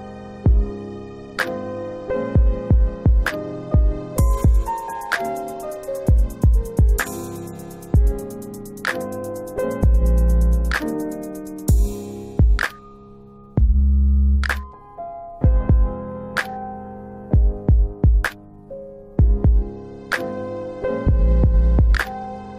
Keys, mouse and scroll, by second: 0.7 click, 2.5 click, 5.2 click, 7.1 middle click, 7.2 scroll down 1, 8.8 scroll down 1, 8.9 click, 9.5 e, 11.4 click, 13.3 click, 14.8 middle click, 15.5 click, 16.7 alt+click, 19.1 Delete.